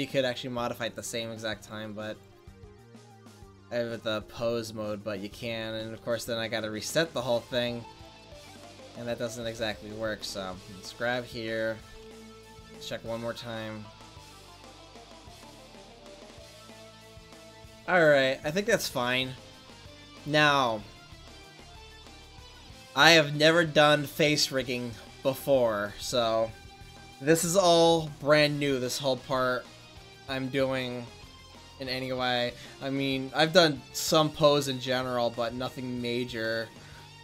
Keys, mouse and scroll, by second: 2.3-5.0 drag, 5.6 a, 5.7 a, 8.2 a, 8.9 middle click, 9.3 middle click, 10.2-11.3 right drag, 11.4-12.5 right drag, 12.6 r, 18.7 ctrl+s, 22.8-23.9 middle drag, 29.8-33.8 drag.